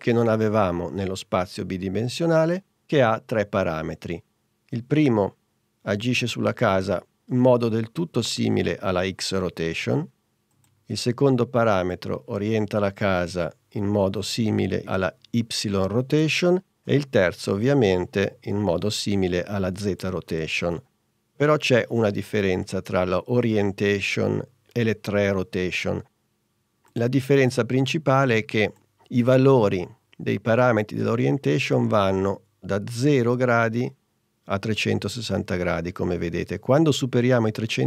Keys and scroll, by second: 10.8 super+z, 16.8 super+z, 20.6 super+z.